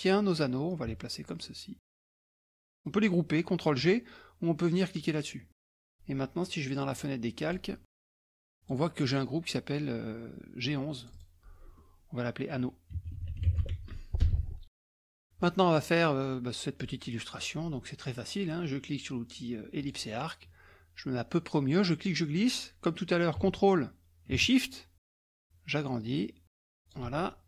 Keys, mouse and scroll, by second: 0.7-2.6 drag, 2.6-3.0 ctrl+scroll down 1, 5.6 click, 6.9 click, 7.5 click, 8.4 click, 11.0 click, 12.8-14.2 typing, 14.5 Return, 15.0 middle click, 15.0 scroll down 1, 15.4 middle click, 19.8 click, 21.4-27.1 drag.